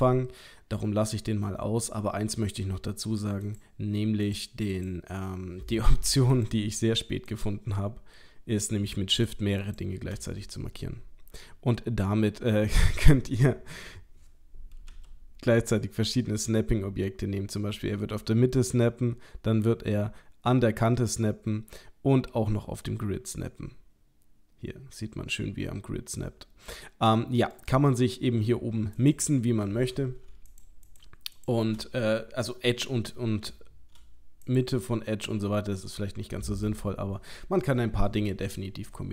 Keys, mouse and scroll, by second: 3.4 click, 4.3 click, 4.7 click, 6.3 click, 14.9 g, 29.0 click, 34.4 click, 36.7 click.